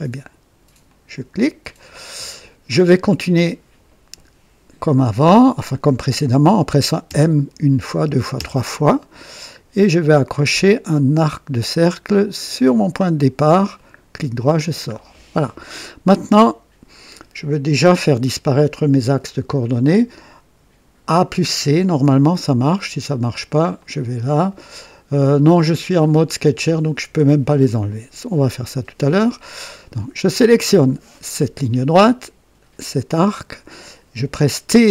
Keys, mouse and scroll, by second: 0.8 click, 1.9-2.8 right drag, 7.0-8.3 typing, 12.5 click, 13.7 right click, 14.5-14.9 scroll down 1, 15.1-15.8 right drag, 16.2 right click, 21.4-22.5 typing, 23.8 click, 27.0 Escape, 27.0 Escape, 29.1 right click, 30.6 click, 33.1 click.